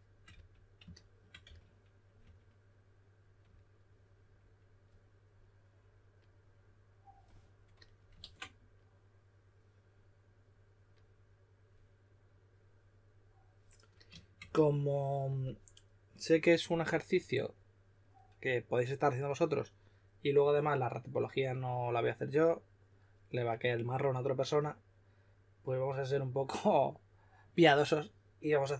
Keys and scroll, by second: 0.3 s, 1.9-2.7 typing, 8.2 super+z.